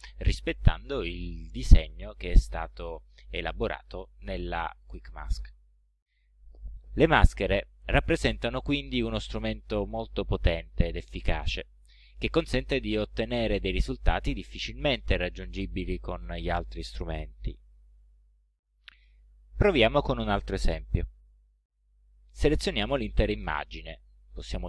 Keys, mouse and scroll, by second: 24.5 ctrl+shift+a.